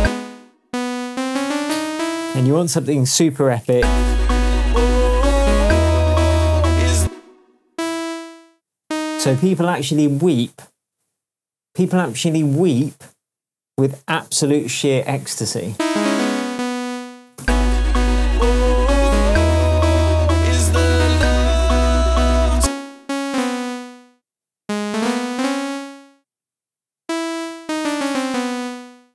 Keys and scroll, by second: 0.0 space, 1.1 Up, 3.7 space, 6.9 space, 17.3 super+d, 17.4 super+space, 22.5 space, 27.6 Down.